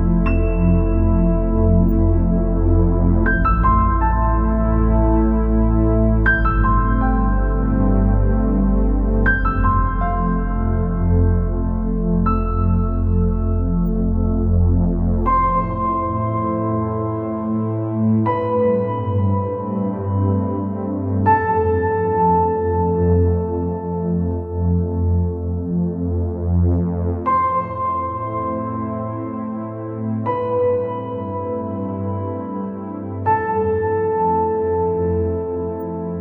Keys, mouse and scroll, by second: 0.0 click, 0.4 scroll down 3, 1.4 scroll up 8, 2.0 middle click, 2.6 click, 3.0 middle click, 3.7 scroll up 3, 3.9 scroll down 4, 3.9 middle click, 4.3-5.2 scroll up 6, 5.2 scroll down 1, 5.4-7.0 middle drag, 7.0-7.3 scroll down 2, 7.3-7.7 scroll up 3, 7.7 scroll down 3, 7.9 middle click, 8.4-9.0 scroll up 6, 9.0 scroll down 1, 9.2 middle click, 9.7 middle click, 10.1-10.6 scroll down 3, 10.6-12.7 middle drag, 12.7-14.1 scroll down 2, 14.1 click, 14.8-15.1 scroll down 4, 15.1 scroll up 2, 16.0 click, 17.4 scroll up 2, 18.1 click, 18.7 scroll down 1, 18.9 middle click, 19.6-20.5 scroll up 3, 20.5 scroll up 4, 20.8 scroll down 2, 20.9-23.9 middle drag, 23.9-24.2 scroll down 3, 24.2-24.6 scroll up 4, 24.6 scroll down 4, 24.8-26.0 middle drag, 26.0-26.9 scroll up 4, 26.9 click, 27.3 scroll down 3, 27.5 middle click, 28.3 scroll down 2, 28.5-31.0 middle drag, 31.0 click, 32.1-35.2 drag, 35.2 scroll up 4, 35.5 scroll down 3, 35.7 middle click.